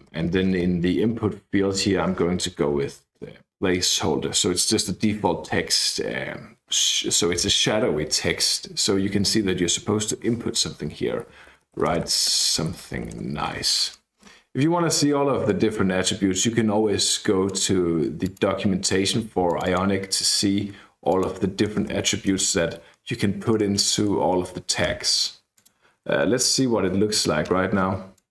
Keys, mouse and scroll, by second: 0.1 Left, 0.3 Left, 0.4 Left, 0.6-1.2 Left, 2.1-3.4 typing, 11.0-13.9 typing, 15.4 click, 16.3-17.8 drag, 18.2 click, 19.4 click, 21.1 click, 21.8 space, 22.3 ctrl+space, 22.9-23.4 scroll down 2, 23.4-24.8 scroll up 2, 24.8 Escape, 25.5 click, 26.4 ctrl+r, 28.1-28.3 drag.